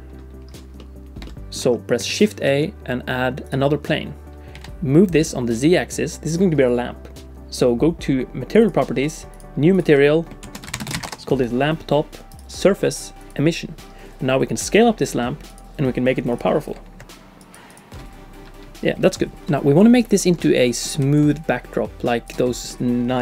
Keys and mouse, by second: 0.8 click, 1.2 shift+click, 2.4 shift+a, 4.5 g, 8.6 click, 9.4-11.7 drag, 12.3-13.3 drag, 14.6 s, 16.4-17.8 drag, 19.5 middle click, 20.2 shift+click, 20.4 click, 20.4 middle click, 20.5 click, 20.6 middle click, 21.0 d, 21.1-22.3 drag, 22.3 d, 22.3 d, 22.4 d, 22.7 middle click.